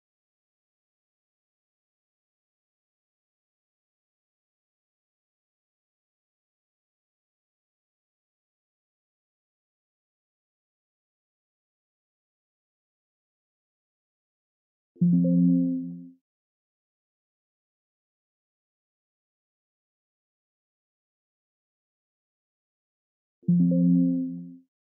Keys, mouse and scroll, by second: 1.0 click, 2.1 click, 3.3 click, 7.2 click, 9.3 click, 11.0 click, 13.5 click, 16.1 click, 17.9 click, 20.5-21.1 scroll, 22.3 click, 24.2 click.